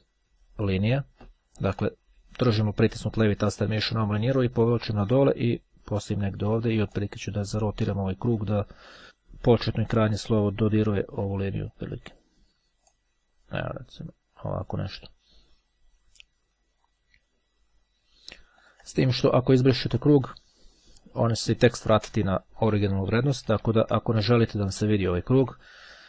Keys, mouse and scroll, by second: 3.6-6.7 drag, 7.1-12.4 drag, 13.0-15.3 drag, 16.6-17.6 drag, 17.6-18.2 ctrl+scroll down 1, 18.6 ctrl+click, 19.6 click, 20.2 click, 21.2 Delete, 23.4 ctrl+z, 25.1 scroll up 2, 25.4-25.8 scroll down 3, 25.8-26.0 ctrl+scroll up 2.